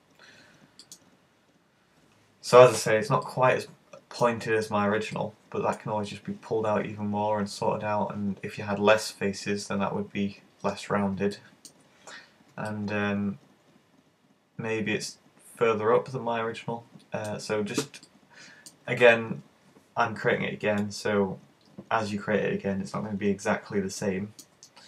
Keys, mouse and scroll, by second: 3.2 middle click, 4.4-5.0 scroll up 5, 5.2 middle click, 11.4 middle click, 12.2-12.7 scroll down 7, 12.7 middle click, 18.1 middle click, 23.4-24.2 scroll up 8, 24.0 middle click, 24.6-24.8 scroll down 5.